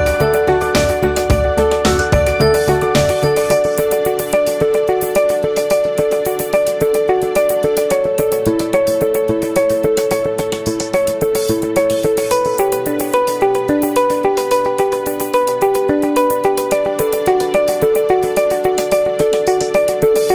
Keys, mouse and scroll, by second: 0.2 alt+click, 0.3 alt+right click, 0.4 alt+middle click, 0.5 alt+right click, 0.7 ctrl+z, 0.8 ctrl+z, 1.3-2.3 ctrl+drag, 2.3 right click, 2.9 ctrl+click, 3.5-4.6 right drag, 4.6 alt+middle click, 4.9 ctrl+click, 5.4 ctrl+z, 5.5 ctrl+click, 6.0 right click, 6.7-7.8 ctrl+drag, 7.8 alt+middle click, 8.1 ctrl+click, 8.8-9.8 right drag, 10.3-13.8 drag, 13.8 alt+middle click, 14.3-17.3 ctrl+drag, 17.3 alt+middle click, 17.4-20.3 alt+drag.